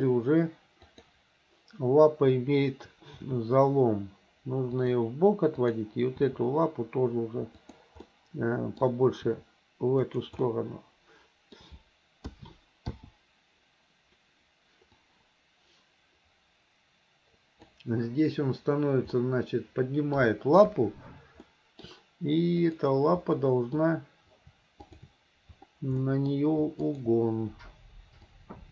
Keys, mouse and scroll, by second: 0.0 click, 3.2 r, 5.6 click, 7.7 r, 8.1 middle click, 9.3 r, 10.5-11.3 middle drag, 12.3 a, 13.0 i, 15.0-17.7 drag, 19.2-20.2 middle drag, 20.7 KP_1, 21.5 middle click, 22.6 click, 23.4 middle click, 24.8 shift+click, 26.0 middle click, 26.9 shift+click, 28.3-28.7 drag.